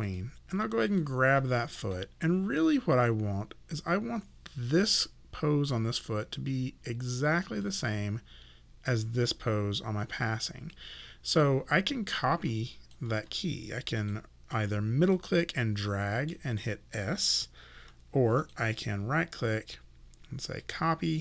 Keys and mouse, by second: 0.0 click, 7.7 click, 10.7 click, 12.2 alt+click, 15.2 middle click, 18.4 click, 18.7 right click, 20.6 click.